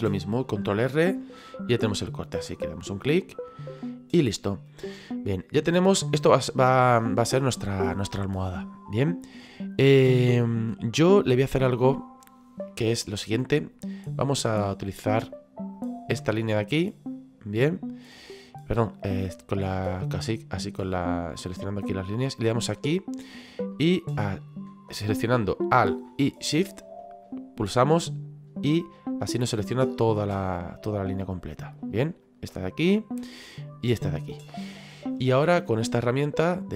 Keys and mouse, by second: 2.0 click, 3.5 middle click, 7.8 middle click, 11.2 middle click, 15.8 click, 16.3 right click, 21.0 click, 22.7 right click, 27.2 alt+shift+right click, 29.8 alt+shift+right click, 30.3 middle click, 32.6 middle click, 36.2 click.